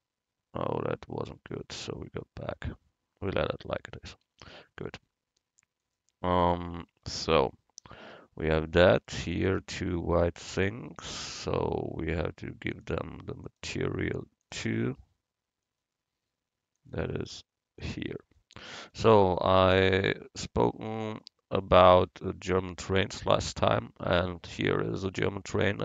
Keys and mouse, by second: 2.1 ctrl+z, 6.0-7.5 drag, 10.4-14.0 right drag, 12.8-15.8 drag, 15.8-18.7 right drag, 16.8-18.7 drag, 18.7-25.2 middle drag.